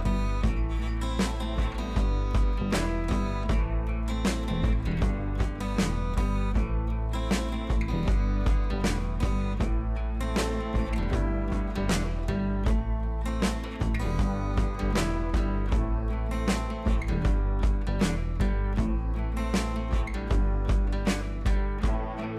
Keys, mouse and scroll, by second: 8.8 click, 9.4 ctrl+t, 10.3-11.4 alt+drag, 14.8 click, 15.2 scroll up 1, 15.9 ctrl+a, 17.1 click, 17.8 ctrl+d, 18.2 click, 20.2 ctrl+a, 21.0-22.1 drag.